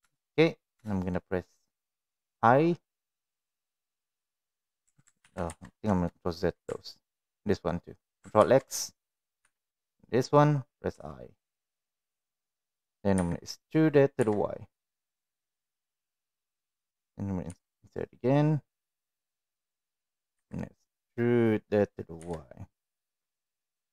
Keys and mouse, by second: 0.0 shift+3, 0.8 shift+middle click, 2.2 i, 5.2 ctrl+z, 5.4 ctrl+z, 8.4 ctrl+x, 9.4 3, 10.9 i, 13.1 e, 17.4 i, 20.3 e.